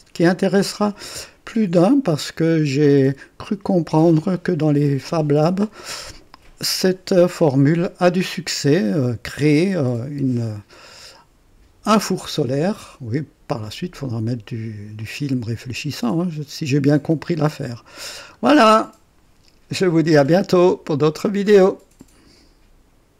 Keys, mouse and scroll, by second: 1.5 scroll down 2, 2.0-2.7 drag, 3.1-4.4 drag, 7.6-10.0 drag, 12.8-13.8 drag, 14.9-17.6 drag, 18.5 right click, 22.1 right click, 23.1 click.